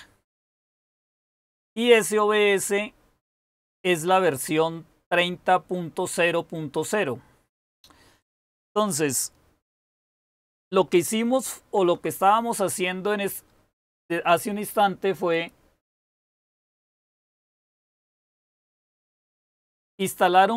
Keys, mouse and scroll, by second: 11.6 super+w, 17.5 super+k.